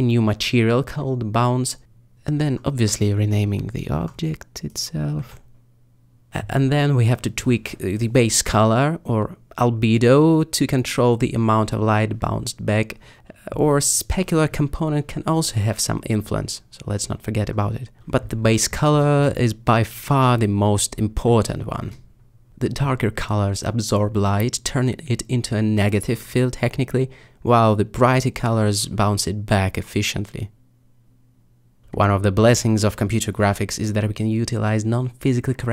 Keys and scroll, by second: 0.0-0.4 typing, 0.4 Return, 3.6-4.0 typing, 4.0 Return.